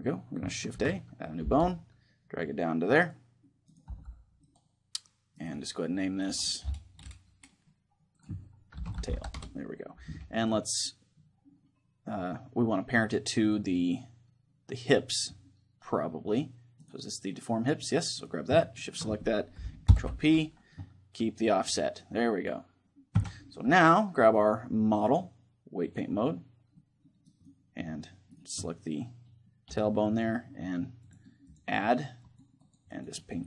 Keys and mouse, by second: 1.2 shift+a, 1.2 g, 2.8 click, 3.4 middle click, 3.6-6.3 drag, 3.6-6.0 right drag, 3.6 g, 6.3 right click, 7.9-9.8 drag, 10.2-11.9 middle drag, 12.5-17.0 middle drag, 16.5-20.1 right drag, 19.6 ctrl+p, 22.9 Tab, 23.3-24.8 middle drag, 24.0 right click, 24.8-27.3 drag, 25.7 right click, 26.5-28.3 middle drag, 27.3-29.8 right drag, 28.3-30.2 middle drag, 29.8-33.4 drag.